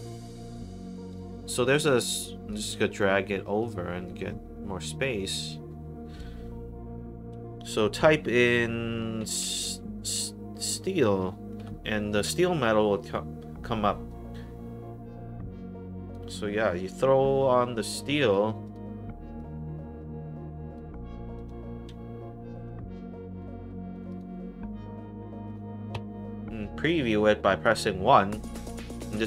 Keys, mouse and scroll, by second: 1.0 click, 2.0 click, 3.5 click, 5.2 click, 9.3-10.1 typing, 11.6 l, 14.0-16.0 drag, 17.8 click, 18.6 click, 19.3 click, 21.3 click, 22.6 click, 23.9 click, 24.0 click, 25.4 click, 25.9 1.